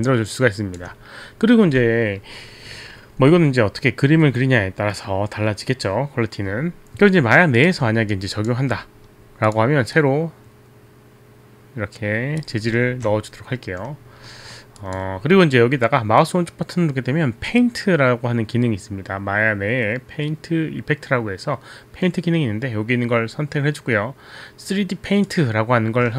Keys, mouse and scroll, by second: 8.0 click, 8.1 alt+click, 9.5 click, 10.0 click, 10.0 right click, 14.3-14.7 alt+middle drag, 14.8 alt+click, 16.2 right click.